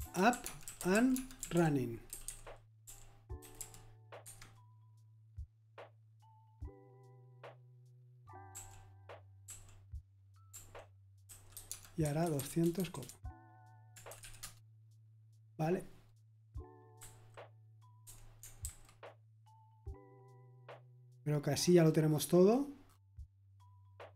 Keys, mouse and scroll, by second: 0.0-4.0 typing, 4.2 Escape, 9.4 typing, 10.5-15.7 typing, 16.9 h, 18.6 super+h.